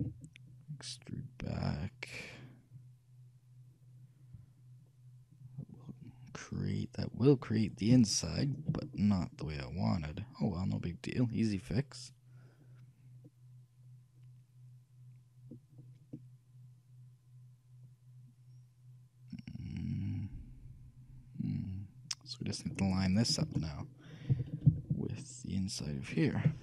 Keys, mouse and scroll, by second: 0.1 e, 9.0-11.4 middle drag, 15.9-16.3 scroll up 1, 16.3-18.2 middle drag, 23.2-26.0 shift+middle drag, 24.5 shift+g.